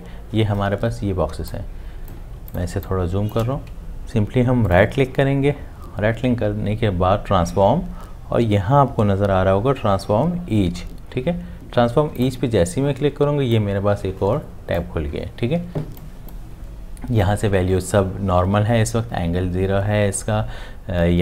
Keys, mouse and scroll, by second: 1.3 space, 1.8 click, 2.6 space, 3.1 click.